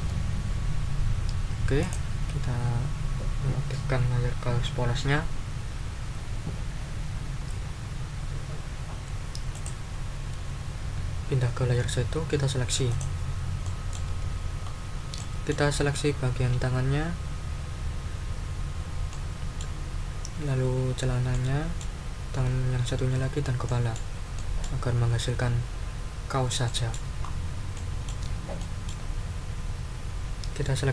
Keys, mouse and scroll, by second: 1.8 click, 9.5 click, 12.9 click, 13.6 middle click, 14.6 ctrl+scroll up 2, 15.1 ctrl+middle click, 16.1 ctrl+scroll down 2, 19.1 middle click, 19.8-21.0 scroll up 2, 21.0-21.3 scroll up 1, 21.3 middle click, 23.6 click, 24.3 click, 26.6 click, 27.2-27.5 ctrl+scroll up 2, 27.7 ctrl+middle click, 28.6 ctrl+middle click, 29.0-29.6 ctrl+scroll up 4, 30.1-30.4 ctrl+scroll up 2.